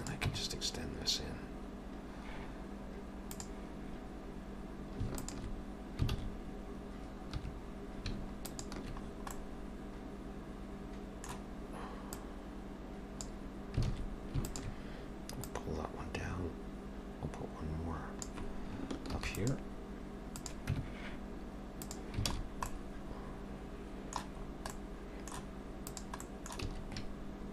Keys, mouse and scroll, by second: 0.0 click, 0.3 Tab, 3.4 click, 5.2 alt+shift+click, 6.1 alt+a, 7.4 2, 8.3 alt+shift+click, 9.1-11.2 scroll down 3, 9.3 middle click, 12.2 click, 13.9 alt+a, 14.4 alt+shift+click, 15.4 click, 19.2 ctrl+r, 20.7 Tab, 22.0 click, 22.3 alt+a, 22.4-23.5 scroll down 3, 22.7 middle click, 24.4-25.5 scroll up 3, 24.7 middle click, 25.9 click, 26.2 middle click, 26.6 s.